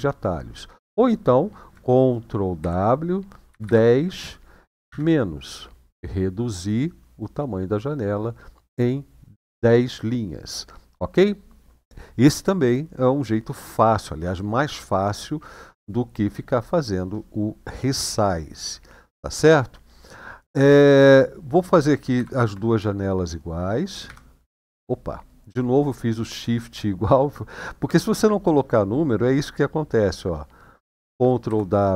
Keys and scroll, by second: 2.4 ctrl+w, 3.2 typing, 4.6 typing, 21.9 ctrl+w, 31.2 ctrl+w.